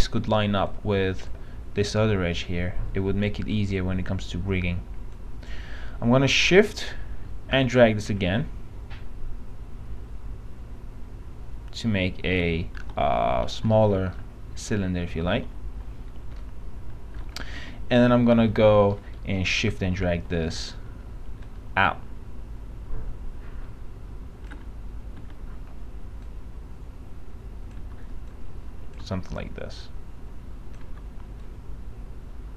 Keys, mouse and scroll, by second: 0.4 w, 0.8-6.1 drag, 6.9 r, 7.9-12.5 shift+drag, 13.0 shift+p, 13.6 shift+z, 13.9-14.2 scroll down 1, 15.0-15.6 scroll down 1, 15.6-16.5 scroll down 1, 17.2 alt+middle click, 17.8 alt+f, 18.8 F3, 19.0 middle click, 19.2 scroll down 1, 20.2-20.7 scroll down 1, 20.7 middle click, 21.6-24.6 shift+drag, 25.4 shift+e, 26.8 click, 28.0 w, 28.5 click, 29.2 click, 31.0 w, 31.6-32.5 drag.